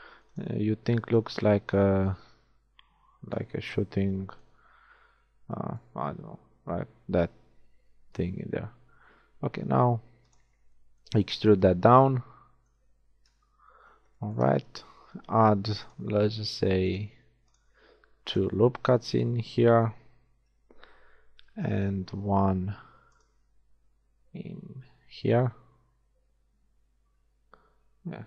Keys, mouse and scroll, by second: 1.2-3.4 drag, 4.2-5.7 shift+middle drag, 8.5 e, 11.8 z, 13.3 KP_1, 13.8 z, 15.3 ctrl+r, 16.3 click, 17.2 ctrl+r, 20.3 a, 21.4 ctrl+r.